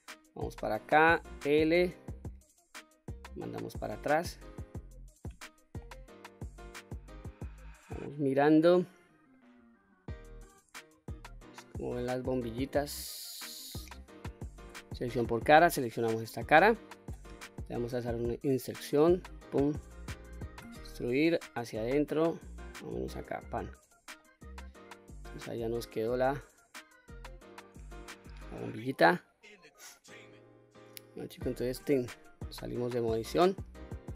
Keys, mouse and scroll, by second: 1.1 l, 3.1-4.5 drag, 8.5-9.7 middle drag, 9.7-10.2 scroll down 1, 10.2-12.2 middle drag, 12.2-12.6 scroll down 1, 12.6 middle click, 13.6-14.6 scroll up 2, 14.6 3, 15.3 click, 16.1 middle click, 17.6 i, 19.0 click, 20.5 e, 23.3 click, 23.8-24.1 scroll down 1, 24.1 middle click, 24.7 click, 25.3-25.7 scroll down 1, 25.7-27.4 middle drag, 27.8-28.1 scroll up 3, 28.5-29.8 middle drag, 31.7 Tab, 32.4-32.8 scroll down 1, 32.8-34.1 middle drag.